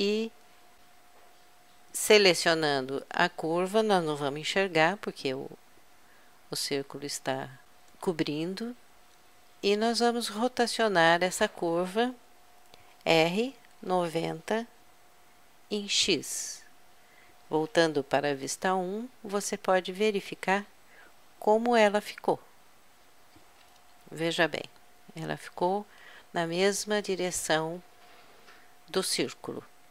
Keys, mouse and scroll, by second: 1.2-2.8 drag, 2.8 middle click, 6.0 z, 13.0 r, 15.8 r, 18.4 KP_1, 22.4-24.4 middle drag, 24.4 KP_Add, 24.8 KP_Add, 25.2 KP_Add.